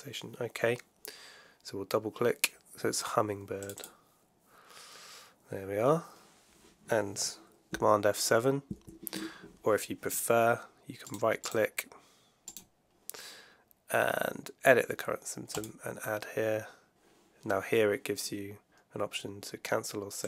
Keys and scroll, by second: 8.6 super+F7.